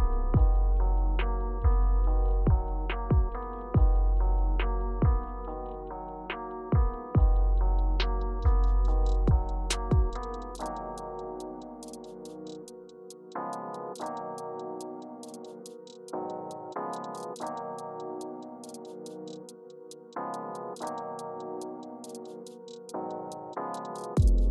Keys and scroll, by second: 5.7-7.3 typing, 10.1 space, 20.5 space.